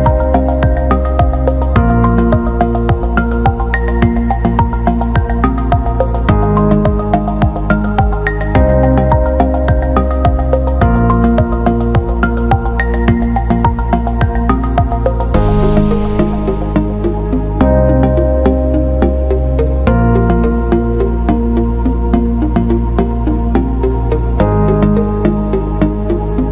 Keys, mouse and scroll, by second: 0.1 alt+middle click, 0.8 click, 2.5-5.6 drag, 5.8 alt+middle click, 7.0 click, 8.3-9.4 drag, 10.0 alt+middle click, 10.7 shift+click, 12.1-13.3 drag, 13.4 alt+middle click, 14.8 click, 15.3 alt+middle click, 16.2 click, 18.0 click, 18.7 shift+click, 19.3 alt+middle click, 21.9 alt+middle click, 23.0 shift+click, 23.7-24.8 alt+middle drag, 25.1-26.5 right drag.